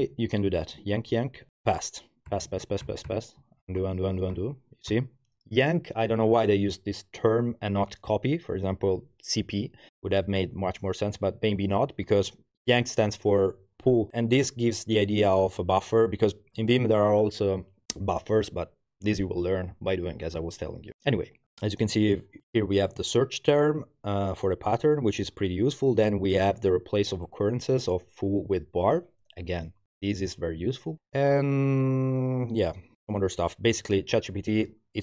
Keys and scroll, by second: 0.0 Escape, 0.6-4.9 typing.